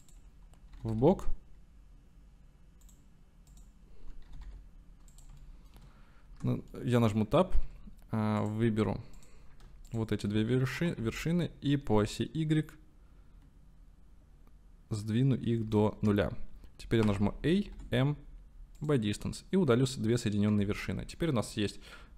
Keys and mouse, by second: 0.1-0.8 drag, 0.8 g, 1.0 y, 2.9 click, 3.5 click, 4.3 g, 4.5 y, 5.2 click, 5.6 shift+click, 6.3 Tab, 6.8 click, 7.2 shift+click, 8.4 click, 9.9 shift+click, 10.8 s, 11.0 x, 11.9 y, 15.6 KP_0, 16.0 KP_Enter, 17.1 a, 17.8 m, 20.5 Tab, 21.2-21.6 drag.